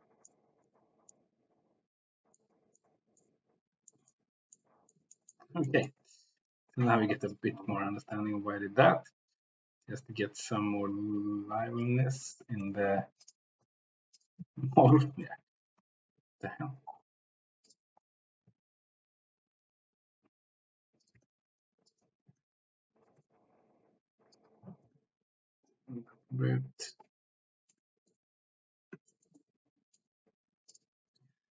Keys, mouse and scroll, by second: 0.2-0.8 middle drag, 1.2-2.3 middle drag, 2.8 middle click, 3.8 shift+middle click, 4.5 middle click, 5.2 shift+middle click, 5.8 middle drag, 6.5 click, 7.3-11.9 drag, 12.3 g, 12.6 x, 13.4 g, 13.5 x, 14.7 Escape, 15.0 g, 15.2 x, 15.9 Escape, 18.5 g, 21.1 click, 21.2-23.2 typing, 22.0 click, 24.3 click, 24.7 g, 24.9 z, 26.8 click, 27.8 middle click, 29.3-30.0 shift+middle drag.